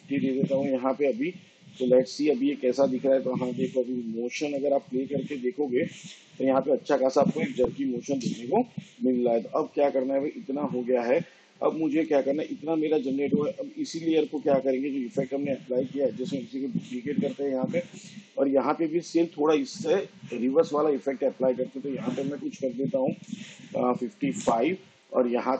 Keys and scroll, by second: 5.4 space, 7.1 space, 16.7 ctrl+d, 23.1 5, 24.3 5.